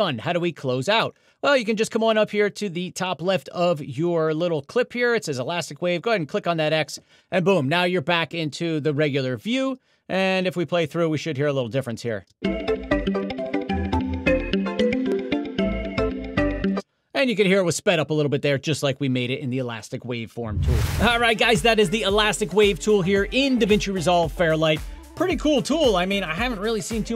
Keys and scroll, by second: 12.3 space, 16.7 space.